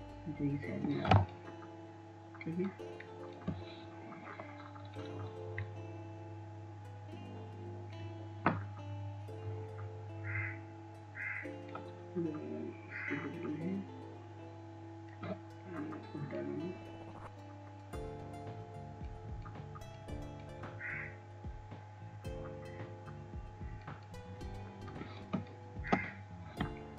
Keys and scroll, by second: 1.9 [, 2.0 [, 2.2 [.